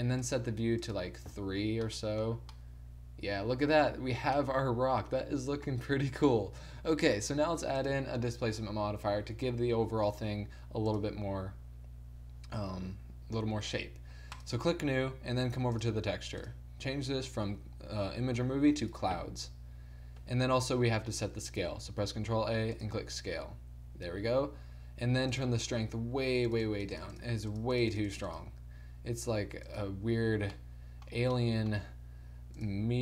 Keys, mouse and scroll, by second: 1.9-3.2 middle drag, 3.9-6.3 middle drag, 7.8-11.4 drag, 14.4-19.3 drag, 22.1 ctrl+a, 25.5-30.6 drag, 30.6-31.8 middle drag, 32.7-33.0 middle drag.